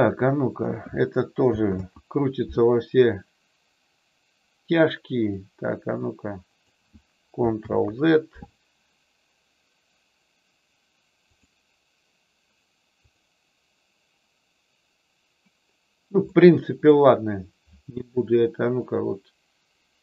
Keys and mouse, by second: 1.6 ctrl+z, 5.2-6.6 drag, 7.6 ctrl+z, 13.0 click, 16.2 middle click, 19.0-20.0 drag.